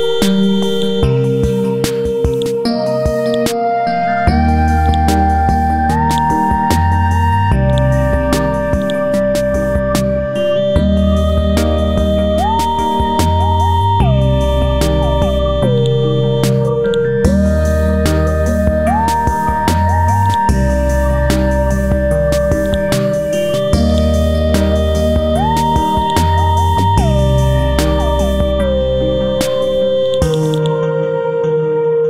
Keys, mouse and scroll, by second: 0.7 shift+click, 2.3-6.1 drag, 6.1 right click, 6.6-7.1 scroll up 1, 7.7-11.6 drag, 12.1 Delete, 12.9 ctrl+shift+d, 14.0 BackSpace, 15.8 click, 17.8 KP_9, 18.0 KP_0, 19.4 scroll down 1, 20.2 click, 21.4-21.9 scroll up 2, 22.6 click, 23.4 ctrl+z, 23.9 alt+click, 26.0-28.5 drag, 28.5 scroll down 1, 30.0 click, 31.2 scroll up 1.